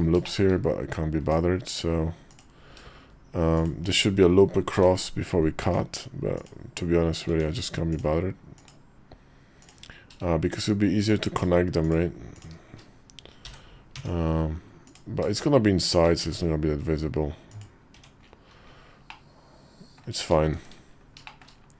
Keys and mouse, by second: 0.0 shift+click, 0.1 shift+middle click, 1.0 Tab, 3.4 shift+click, 4.5 j, 5.4 Tab, 6.1 click, 7.0 Tab, 7.7 click, 8.4 click, 12.1 shift+click, 13.2 j, 13.7 Tab, 14.6 click, 16.0 x, 17.7 Tab, 18.8 middle click, 20.3 shift+2, 21.0 shift+middle click.